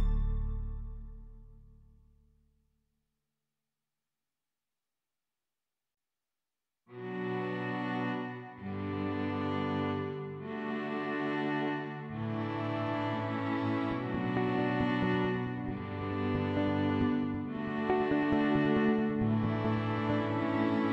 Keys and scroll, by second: 5.7 4, 6.1 ., 6.8 5, 7.1 Return.